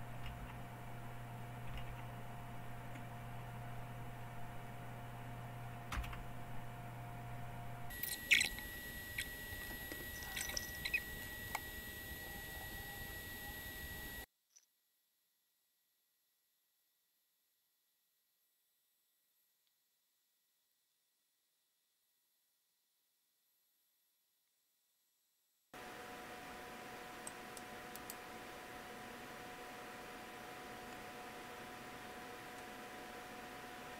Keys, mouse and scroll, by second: 0.1 Up, 5.9 Return, 11.7 scroll down 2, 13.0 right click, 13.2 click, 13.3 click, 13.6 click, 14.4 click, 15.6 click, 20.9 right click, 21.1 click, 21.5 click, 21.8 click, 22.3 click, 22.4 click, 25.4 click, 27.1-32.0 drag.